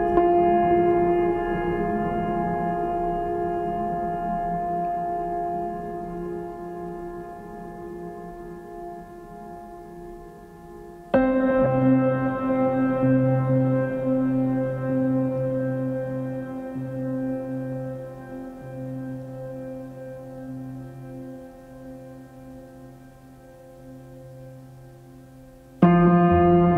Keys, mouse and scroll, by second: 0.2 right click, 0.6 right click, 1.2 right click, 6.3 right click, 7.3 right click, 7.7 right click, 8.0 right click, 11.0 right click, 12.1 right click.